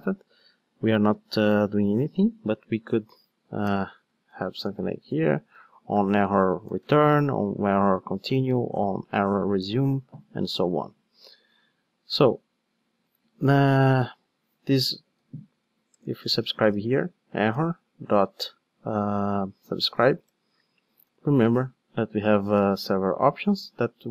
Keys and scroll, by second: 12.9 super+x, 15.1 Tab, 17.1 Tab, 17.2 Return, 21.0 super+p.